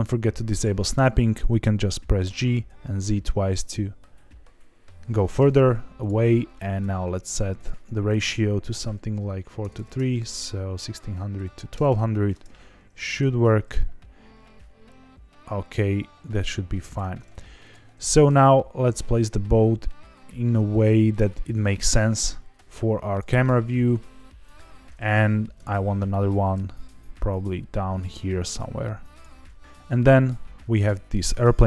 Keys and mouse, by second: 0.5 click, 2.2 g, 2.4 z, 2.6 z, 5.2 click, 5.3 g, 5.9 click, 6.7 click, 7.6-12.8 drag, 9.7 KP_0, 11.8 KP_0, 13.2 g, 13.3 z, 13.5 z, 16.8 click, 17.6 click, 18.0 g, 21.1 ctrl+click, 21.5 r, 21.7 z, 21.8 z, 23.0 click, 23.4 s, 24.4 click, 25.5 alt+d, 29.1 ctrl+click, 29.4 r.